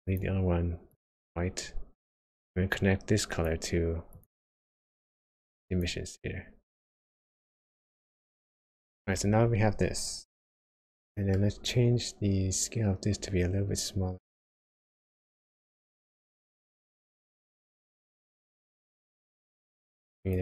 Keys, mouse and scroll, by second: 2.7 click, 4.7 click, 8.3-9.2 scroll up 5, 9.2-10.8 scroll down 2, 11.1 shift+middle click, 11.4-12.3 shift+scroll up 5, 12.5 scroll down 1, 14.6 click, 18.3 click.